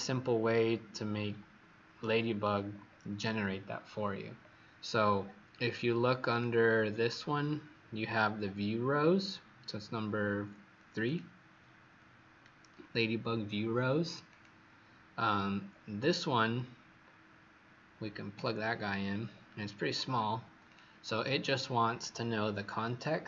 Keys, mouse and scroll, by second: 2.4-3.0 scroll up 4, 6.2 click, 15.3-18.3 scroll down 4, 18.3 click, 19.0-19.9 scroll up 10, 20.6 click.